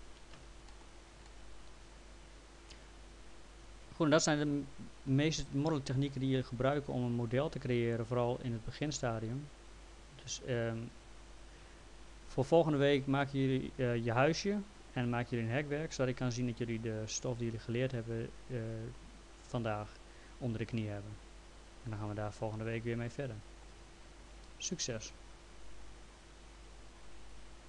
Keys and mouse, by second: 0.3 p, 0.7 middle click, 1.3 alt+middle click, 13.2 alt+middle click, 15.9 alt+middle click, 25.6 click, 27.3 click.